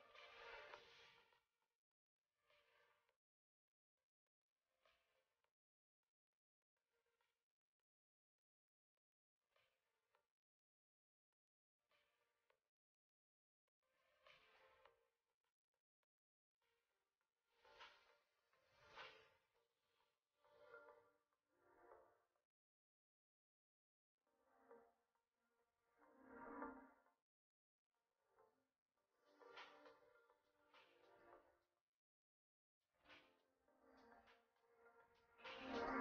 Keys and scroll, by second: 2.4 ctrl+[, 11.5 ctrl+c, 30.9 shift+space.